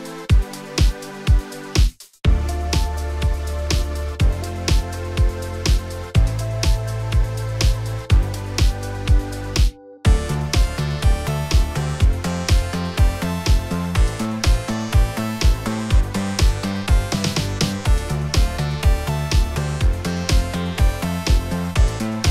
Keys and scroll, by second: 6.7 f.